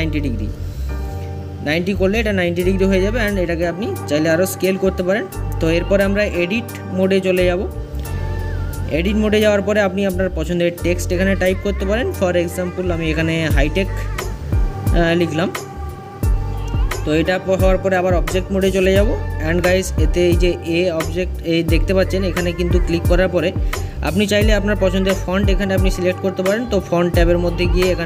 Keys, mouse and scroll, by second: 0.6 s, 8.5-10.3 drag, 9.8-10.7 BackSpace, 12.6 i, 13.3 t, 13.4 e, 20.9-28.0 drag.